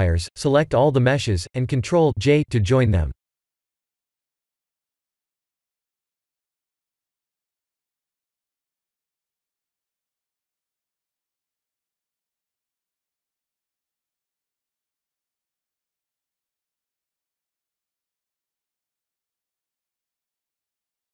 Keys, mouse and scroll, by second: 3.5 middle click, 3.9 click, 4.2 b, 8.3 click, 9.5 click, 10.5 ctrl+a, 13.2 right click, 16.9 click, 19.7 click.